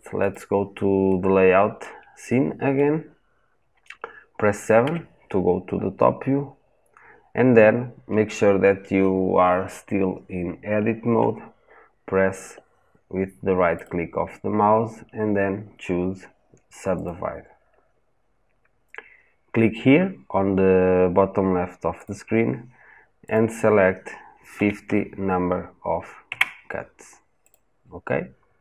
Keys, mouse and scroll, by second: 0.0 click, 0.8-4.6 middle drag, 4.6 KP_7, 5.5 scroll up 1, 6.0-6.6 scroll down 1, 6.6-7.0 scroll up 1, 7.0-7.4 scroll down 1, 26.1 KP_Enter, 27.3 click.